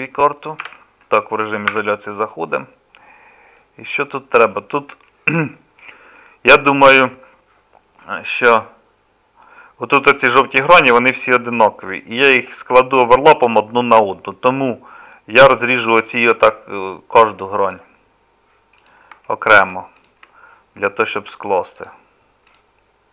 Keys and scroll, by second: 0.7 KP_Divide, 1.7 Tab.